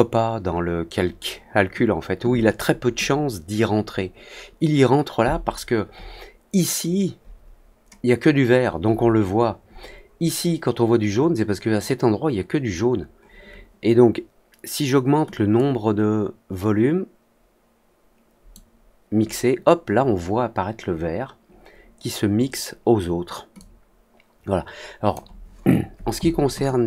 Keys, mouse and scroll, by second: 15.5-18.4 drag, 23.5-25.0 drag.